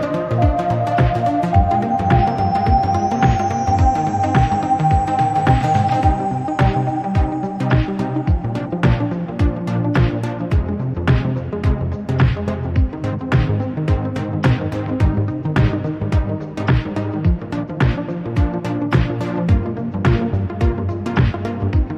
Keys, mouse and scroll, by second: 0.0-2.0 right drag, 2.0-4.5 drag, 4.8-6.8 scroll up 2, 7.0 click, 7.4-9.3 scroll down 2, 9.6 click, 11.8 click, 12.5 click, 13.0-13.3 scroll down 1, 13.3 Tab, 13.8 Tab, 14.2 middle click, 15.0 KP_Decimal, 15.8 click, 16.1-18.0 middle drag, 19.0 shift+middle click, 19.9 ctrl+z, 20.1 ctrl+z, 20.6 ctrl+z, 20.9 ctrl+z, 21.5-21.9 right drag.